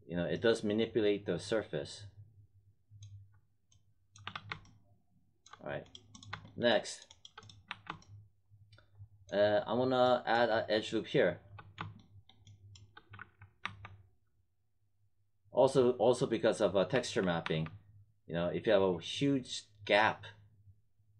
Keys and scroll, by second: 4.2 3, 7.6 1, 13.0 3, 13.6 1, 16.8 3, 17.4 1.